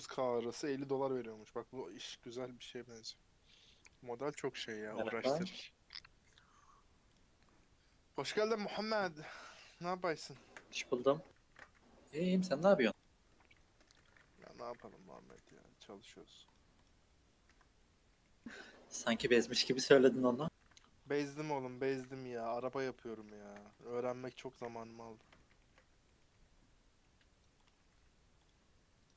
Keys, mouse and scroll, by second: 0.0-4.1 drag, 4.6 middle click, 4.8-5.1 scroll up 3, 5.1-6.7 middle drag, 6.7-7.1 scroll down 1, 7.1 click, 7.4-7.9 scroll up 2, 7.4 middle click, 7.9-8.4 middle drag, 8.4 scroll down 1, 8.6-9.3 scroll up 4, 9.3-9.7 scroll down 4, 11.5 ctrl+shift+s, 16.5 click, 16.8 click, 17.5 KP_Decimal, 18.2-19.5 middle drag, 19.5 click, 19.9-20.5 scroll down 4, 21.2-21.7 scroll down 1, 21.9 /, 22.1-22.6 scroll down 3, 22.6 click, 22.8 scroll up 6, 23.0-23.8 middle drag, 23.8 click, 24.6 KP_Decimal, 25.0 scroll up 4, 25.2 middle click, 25.4 scroll down 4, 25.6 shift+middle drag, 25.8 scroll up 3, 26.0-26.4 middle drag, 26.4 q, 27.9 q.